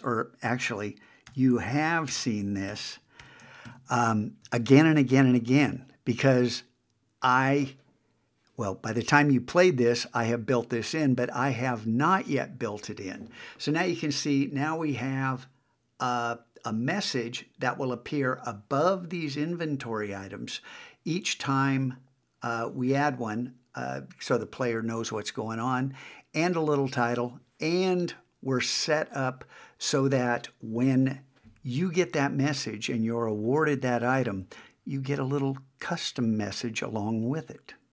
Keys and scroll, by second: 3.7 shift+1.